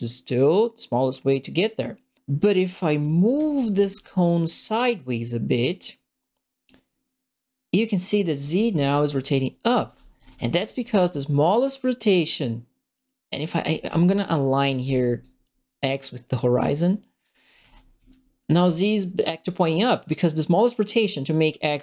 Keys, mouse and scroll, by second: 2.6-3.6 right drag, 2.8-3.8 typing, 3.6 click, 3.8 right click, 4.9-8.3 right drag, 8.2-10.7 typing, 8.5-11.4 right drag, 12.3-13.4 drag, 13.4-14.5 typing, 13.6-15.2 right drag, 16.0-17.2 drag, 17.2-18.5 typing, 17.4 right click, 18.0 click.